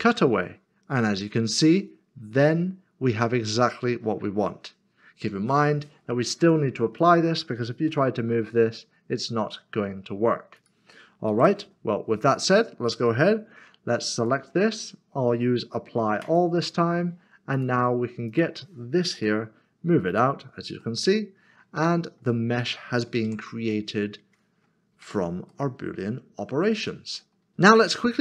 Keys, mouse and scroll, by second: 1.0 middle click, 6.4 click, 7.9 g, 10.5 click, 11.3 ctrl+z, 12.3 click, 16.2 click, 19.1 g, 20.1 click, 20.8 middle click, 21.8 shift+middle click, 22.8 middle click, 23.3 Tab, 23.7 middle click, 25.5 1, 25.7 middle click, 27.5 middle click.